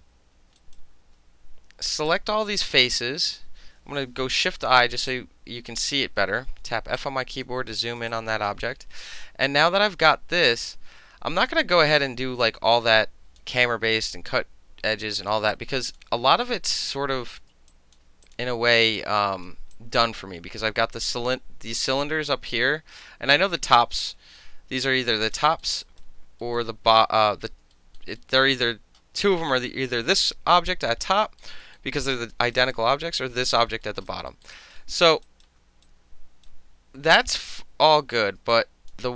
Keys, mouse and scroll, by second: 0.6 alt+right click, 1.9 click, 2.1 click, 4.3 shift+i, 5.1 alt+click, 6.2 f, 7.0 alt+click, 7.5 alt+middle click, 7.7 alt+right click, 8.0 alt+middle click, 8.1-12.5 alt+drag, 12.5 alt+middle click, 12.7 alt+click, 13.4 alt+middle click, 14.1-15.3 alt+drag, 15.3 alt+middle click, 15.5 alt+click, 16.3-16.9 alt+right drag, 17.3 alt+click, 17.7 alt+drag, 18.2 click, 19.0 alt+right click, 19.7 alt+click, 25.1 alt+right click, 25.5 alt+middle click, 25.6 alt+middle click, 25.8 alt+right click, 26.5-27.7 alt+middle drag, 28.0 alt+click, 28.4-31.0 alt+drag, 31.2 alt+middle click, 31.6 alt+middle click, 32.0 alt+right click, 32.3 alt+middle click, 32.5 alt+right click, 32.7-33.8 alt+middle drag, 34.0 alt+middle click, 34.1 alt+right click, 34.2 alt+middle click, 34.4 alt+middle click, 34.5 alt+right click, 34.8 alt+middle click, 35.2 alt+right click, 35.8 right click, 38.2 alt+middle click, 38.5 alt+click, 38.9 alt+middle click.